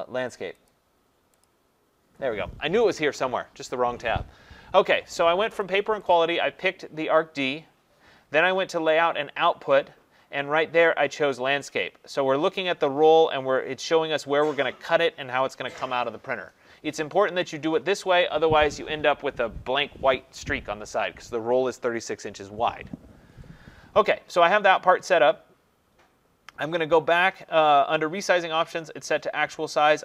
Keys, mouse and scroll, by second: 0.7 click, 1.4 click, 5.6 click, 6.1 click, 8.9 click, 12.1 click, 29.9 click.